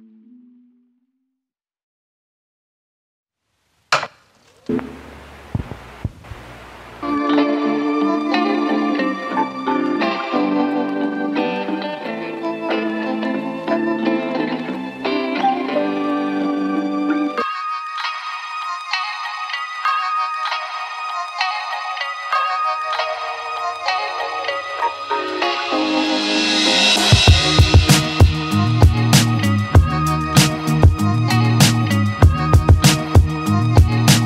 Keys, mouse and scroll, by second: 1.1-1.5 alt+right drag, 1.5-2.5 alt+drag, 2.5 z, 3.5-4.2 alt+drag, 4.2 Tab, 4.8 Tab, 5.2 z, 5.5 z, 6.1 click, 6.4 alt+right click, 6.6-10.0 alt+drag, 12.0 click, 12.7 click, 13.3 click, 14.6 click, 14.8 Tab, 15.4 Tab, 17.1-18.1 drag, 18.4 click, 18.9 `, 19.5 z, 20.3-20.6 scroll up 1, 20.6 Tab, 21.1 alt+middle click, 21.6-22.4 scroll up 1, 22.4 click, 23.9 alt+middle click, 24.4 shift+click, 25.2 shift+click, 26.4 ctrl+z, 27.1 click, 27.7 alt+middle click, 28.3 shift+click, 29.8 shift+click, 30.8 alt+middle click, 31.3 shift+click, 31.7 alt+middle click, 32.2 shift+click, 32.7 shift+click, 33.4 shift+click, 33.8 alt+middle click.